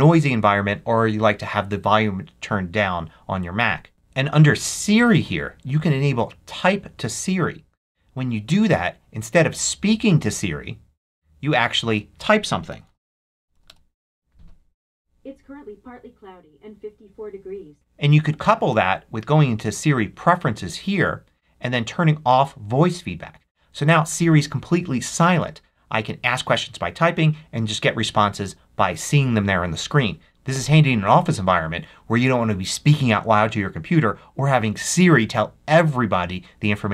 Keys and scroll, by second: 12.4-13.9 typing.